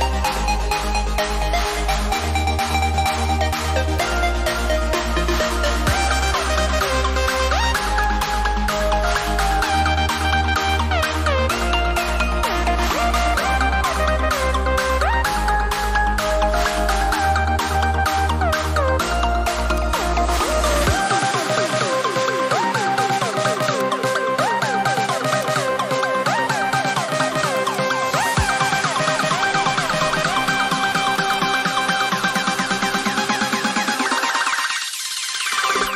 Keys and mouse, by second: 8.0 click, 18.7 x, 19.6 click, 31.1 click.